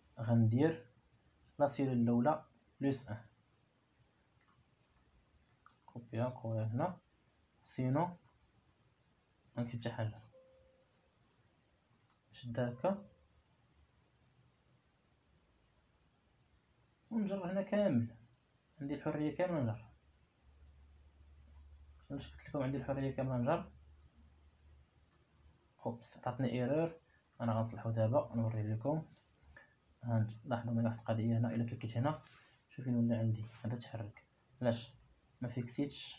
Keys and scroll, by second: 5.3 ctrl+c, 6.7 ctrl+v, 8.0 ., 8.9 3, 11.8 Return, 34.6 Escape.